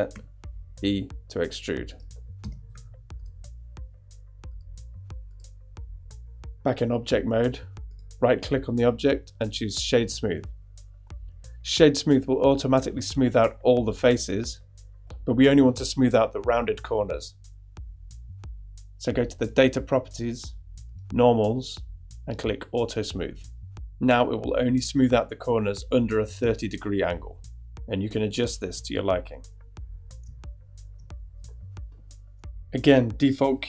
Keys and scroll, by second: 0.1 e, 2.4 Tab.